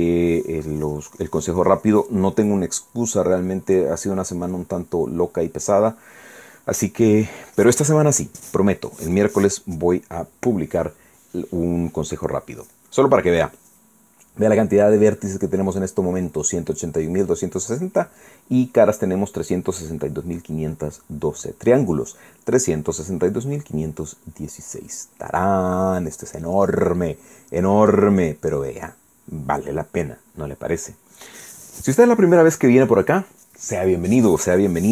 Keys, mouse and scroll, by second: 28.3 scroll up 2, 29.2-29.9 scroll down 2.